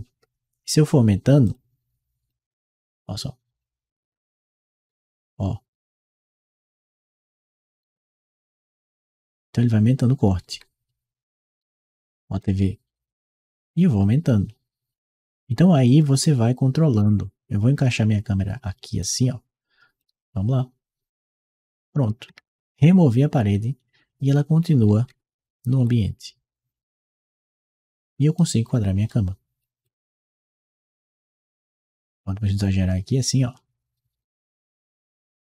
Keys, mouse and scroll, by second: 1.2 click, 2.2-4.1 drag, 4.7-12.6 right drag, 7.7 a, 10.3 w, 13.4-15.2 drag, 15.6-18.8 right drag, 16.7 d, 19.8-21.4 drag, 21.6-28.9 right drag, 22.1 a, 22.5 d, 24.9 s, 25.6 w, 29.7 click, 31.8-35.5 drag.